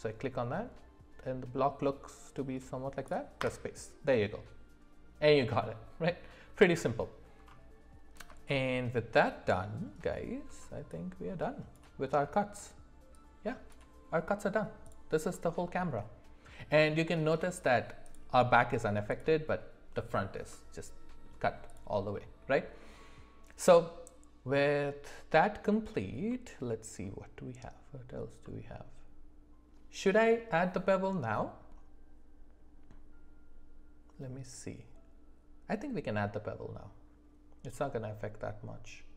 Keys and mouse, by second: 0.0-3.6 drag, 8.4-9.8 shift+middle drag, 14.8 click, 15.3-16.9 middle drag, 18.0 click, 20.5-21.3 middle drag, 22.1 middle click, 26.3 middle click, 28.4 middle click.